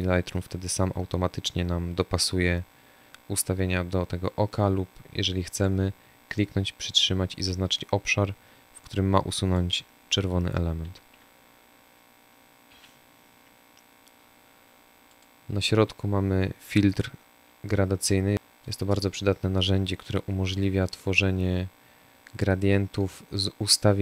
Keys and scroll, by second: 11.6 Delete.